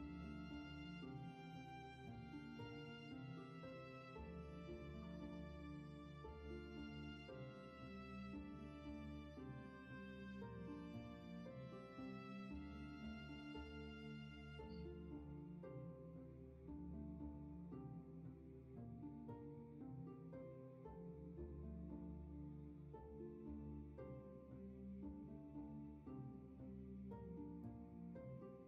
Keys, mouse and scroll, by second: 10.1 w, 12.0 w.